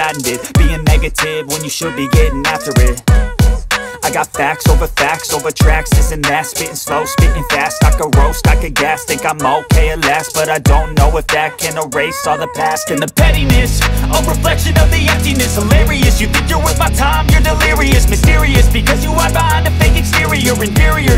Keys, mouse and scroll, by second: 0.1-1.3 drag, 1.3 space, 1.3 click, 1.5 space, 2.0 click, 2.9 space, 4.0-6.8 drag, 6.8 space, 7.3-8.5 drag, 8.5 space, 8.7 click, 8.7 space, 9.7-10.9 drag, 11.0 click, 11.1 space, 11.6-14.2 drag, 14.2 space, 14.9-16.1 drag, 16.1 space, 17.6 click, 18.9 space, 19.0 click, 19.1 space, 19.6-21.1 drag.